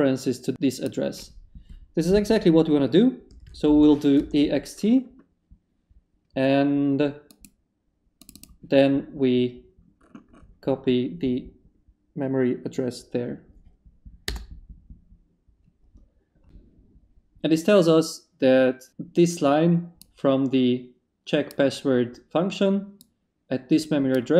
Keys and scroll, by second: 3.0-4.1 typing, 14.2 Return.